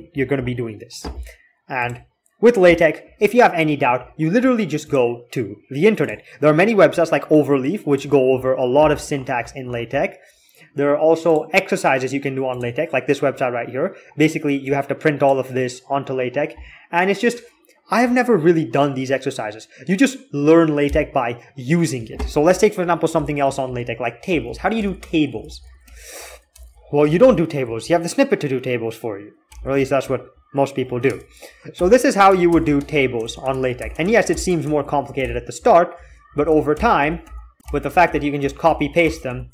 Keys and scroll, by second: 22.4 alt+x, 22.9 alt+x, 23.5-27.5 typing, 29.3 ctrl+f, 30.9 Tab, 35.5-39.5 typing.